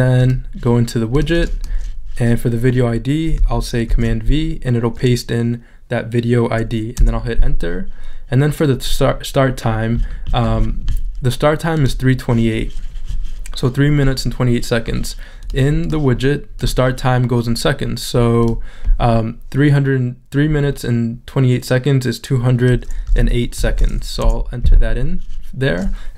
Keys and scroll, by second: 4.6 super+v, 7.0 Return, 23.1 2, 25.2 Return.